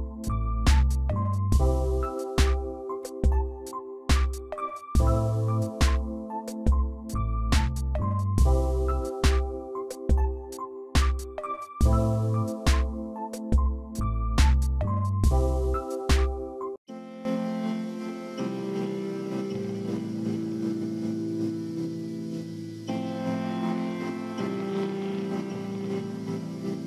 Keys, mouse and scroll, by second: 5.8 shift+click, 6.6 shift+click, 6.8 ctrl+g, 7.9 ctrl+a, 11.1 ctrl+d, 23.7-26.8 typing, 24.8 Caps_Lock.